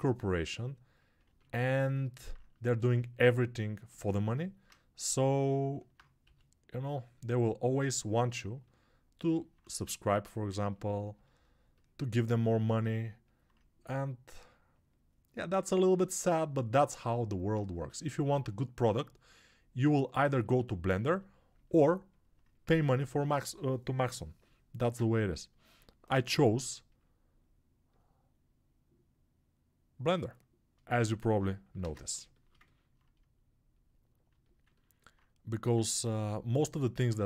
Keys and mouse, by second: 6.1 g, 8.8 right click, 9.1-10.2 drag, 10.2-12.3 ctrl+alt+right drag, 12.3 click, 12.4 alt+right click, 13.3-37.2 drag, 24.7 ctrl+space, 31.7 ctrl+space.